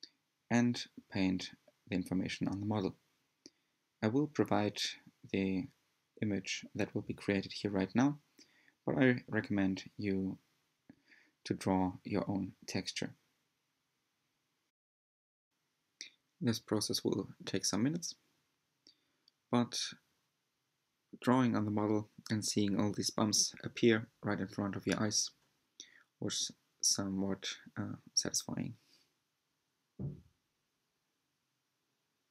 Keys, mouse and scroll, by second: 0.0 shift+middle click, 0.1-0.4 drag, 0.4 shift+middle click, 0.5 drag, 0.7 shift+middle click, 0.7 click, 1.1 shift+middle click, 1.2 scroll down 1, 1.3 shift+middle click, 1.3 click, 1.9 shift+middle click, 1.9 drag, 2.1 shift+middle click, 2.1 drag, 2.3 shift+middle click, 2.3 drag, 2.5 shift+middle click, 2.6 drag, 2.7 shift+middle click, 2.8 drag, 2.9 middle click, 3.0 drag, 3.2 shift+middle click, 3.4 drag, 3.6 click, 3.7 click, 3.7 shift+middle click, 3.8 drag, 3.9 shift+middle click, 4.1 drag, 4.3 shift+middle click, 4.4 drag, 4.5 shift+middle click, 4.6 drag, 4.8 shift+middle click, 4.8-5.3 drag, 5.3 shift+middle drag, 5.4 drag, 5.5 middle click, 5.6 click, 5.7 shift+middle drag, 5.7 drag, 5.9 shift+middle click, 5.9 drag, 6.2 shift+middle click, 6.2-6.6 drag, 6.6 shift+middle click, 6.7 drag, 7.0 middle click, 7.0 drag, 7.2 shift+middle click, 7.2 drag, 7.3 shift+middle click, 7.5 click, 7.9 shift+middle click, 8.0-8.3 drag, 8.3 shift+middle click, 8.3 drag, 8.5 shift+middle click, 8.5 drag, 8.6 shift+middle click, 8.7 drag, 8.9 shift+middle click, 8.9 click, 9.2 shift+middle click, 9.3 drag, 9.4 shift+middle click, 9.8 drag, 10.1 shift+middle click, 10.1 drag, 10.2 shift+middle click, 10.3 drag, 10.5 shift+middle click, 10.6-11.0 drag, 11.0 shift+middle click, 11.0-11.4 drag, 11.4 shift+middle click, 11.5 shift+middle click, 11.6 click, 12.0 shift+middle drag, 12.0 drag, 12.3 shift+middle click, 12.3 drag, 12.5 shift+middle click, 12.5 drag, 12.7 shift+middle click, 12.8 drag, 13.0 shift+middle click, 13.0 drag, 13.3 shift+middle click, 13.4 click, 13.7 click, 14.0 shift+middle drag, 14.1-14.5 drag, 14.5 shift+middle click, 14.5-14.9 drag, 14.9 shift+middle click, 14.9 drag, 15.1 shift+middle click, 15.1-15.5 drag, 15.5 shift+middle click, 15.5-15.9 drag, 15.9 shift+middle click, 16.0 click, 16.2 drag, 16.3 shift+middle click, 16.3 click, 16.7 shift+middle click, 16.7 drag, 16.9 shift+middle click, 16.9 click, 17.6 shift+middle click, 17.6 drag, 17.8 shift+middle click, 17.9-18.2 drag, 18.2 shift+middle click, 18.3 drag, 18.5 shift+middle click, 18.5 drag, 18.7 shift+middle click, 18.7-19.0 drag, 19.0 shift+middle click, 19.1-19.4 drag, 19.4 shift+middle click, 19.5 click, 19.7 shift+middle click, 19.7 drag, 19.9 shift+middle click, 19.9 drag, 20.0 shift+middle click, 20.1 drag, 20.2 shift+middle drag, 20.2 drag, 20.4 shift+middle click, 20.4 drag, 20.7 shift+middle click, 20.8 drag, 21.0 shift+middle click, 21.0 drag, 21.3 shift+middle click, 21.4 drag, 21.6 shift+middle drag, 21.6 drag, 21.8 drag, 22.1 shift+middle click, 22.1 click, 22.2 shift+middle click, 22.2 click, 22.3 middle click, 22.3 click, 22.6 shift+middle click, 22.9 drag, 23.1 scroll down 1, 23.2 click, 23.2 shift+middle click, 23.3 drag, 23.4 shift+middle click, 23.4 drag, 23.6 shift+middle click, 23.6 drag, 23.9 shift+middle click, 23.9 drag, 24.2 shift+middle click, 24.4 drag, 24.6 shift+middle click, 24.6 drag, 24.8 shift+middle click, 24.9 drag, 25.1 shift+middle click, 25.1 click, 25.4 middle drag, 25.4 drag, 25.6 shift+middle click, 25.6 drag, 25.9 shift+middle click, 26.0 click, 26.6 shift+middle click, 26.6 drag, 26.7 shift+middle click, 26.8 drag, 27.0 shift+middle click, 27.0 drag, 27.3 middle click, 27.3 drag, 27.5 shift+middle click, 27.6 click, 27.9 shift+middle click, 28.0 drag, 28.1 shift+middle click, 28.1 click, 28.3 shift+middle click, 28.3 drag, 28.5 shift+middle click, 28.6-29.0 drag, 29.0 middle click, 29.0 click, 29.2 middle click, 29.2 click, 29.5 shift+middle click, 29.8 shift+middle click, 29.8 click, 30.4 middle click, 30.5 click, 30.9 shift+middle click, 31.0 drag, 31.1 shift+middle click, 31.2 z, 31.2-31.6 drag, 31.6 scroll down 1, 31.7 click, 31.7 shift+middle click, 31.7 drag, 32.0 shift+middle drag, 32.0-32.3 drag.